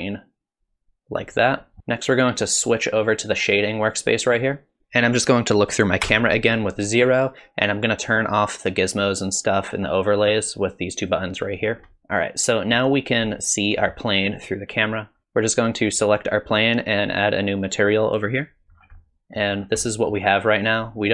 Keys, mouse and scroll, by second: 4.8 KP_0, 6.1 KP_0, 10.4 click, 11.9-12.5 scroll up 3, 13.1 click, 15.8 click, 18.1 click, 18.8-19.2 scroll down 3, 19.0 middle click, 19.6-20.7 scroll up 3, 19.9 middle click, 20.7 click.